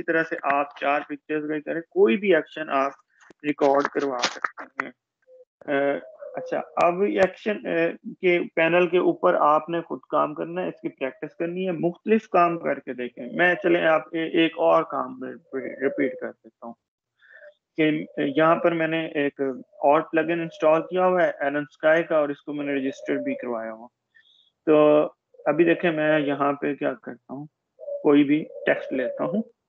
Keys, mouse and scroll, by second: 14.0 shift+click, 21.7 shift+Escape, 23.7 shift+click.